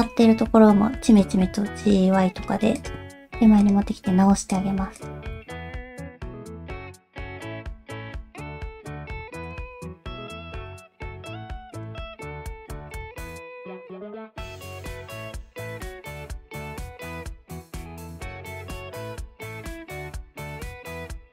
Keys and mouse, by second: 1.0 g, 3.3 alt+z, 4.5 click, 5.0 click, 5.4 middle click, 5.9 middle click, 6.5 click, 6.7 alt+z, 7.1 g, 7.7 alt+z, 7.9 click, 8.1 alt+z, 8.2 middle click, 8.5 g, 9.1 middle click, 9.5 click, 9.7 middle click, 10.4 middle click, 11.0 g, 12.0 middle click, 12.4 alt+z, 12.9 click, 13.4 alt+z, 13.6 middle click, 14.1 g, 15.2 middle click, 15.5 click, 15.6-17.7 typing, 16.0 click, 16.2 click, 17.0 click, 17.2 shift+middle click, 17.4 click, 17.5 alt+z, 19.1 alt+z, 19.3 middle click, 19.9 alt+z, 20.9 g.